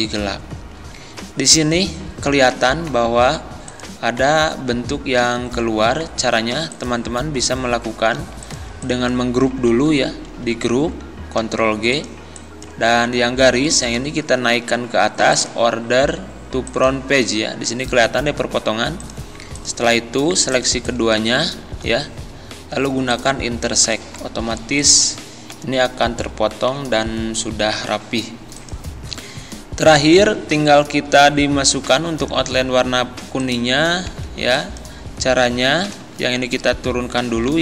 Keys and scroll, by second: 9.7 ctrl+z, 11.4 ctrl+g, 13.0 ctrl+z, 21.8 ctrl+z, 25.5 Delete, 37.5 ctrl+z.